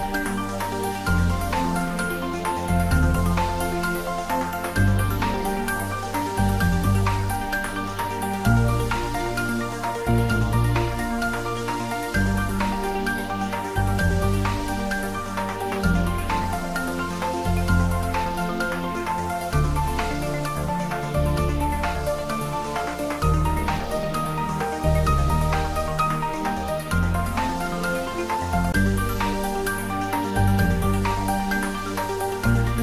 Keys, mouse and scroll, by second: 0.4 scroll up 1, 1.3 scroll up 1, 3.4 click, 4.0 s, 6.8 click, 8.3 s, 9.2 click, 10.0 e, 11.5 click, 28.5 scroll up 1, 30.2-32.8 drag.